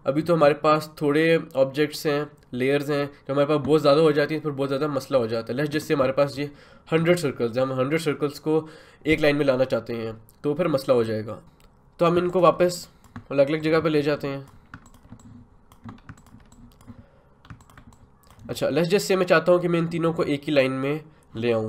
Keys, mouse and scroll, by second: 12.3-21.6 ctrl+drag.